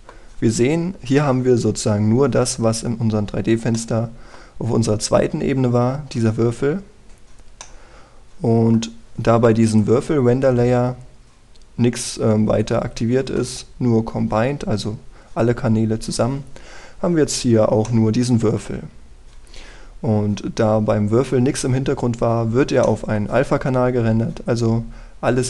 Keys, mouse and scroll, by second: 0.4-5.9 middle drag, 7.6-8.3 scroll down 1, 8.3-9.9 middle drag, 10.3 click, 11.0-11.8 scroll down 1, 14.1-16.9 scroll up 1, 18.5 middle click, 19.6-22.1 scroll down 1, 23.0-23.5 scroll up 1, 23.5 middle click, 23.9-25.4 scroll up 1.